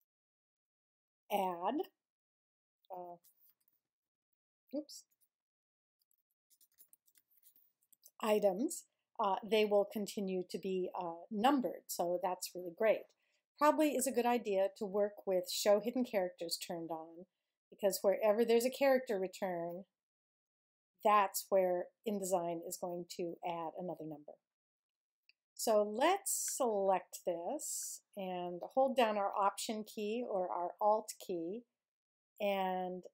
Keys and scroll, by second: 0.0-0.1 typing, 0.5 Return, 2.8-4.8 typing, 6.0-8.3 typing, 20.4 Return, 23.8 BackSpace.